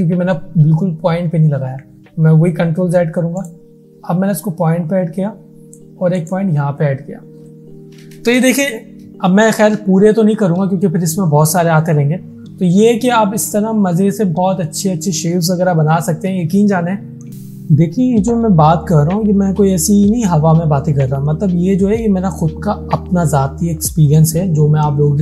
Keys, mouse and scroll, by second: 1.6 ctrl+z, 3.5 click, 6.2 click.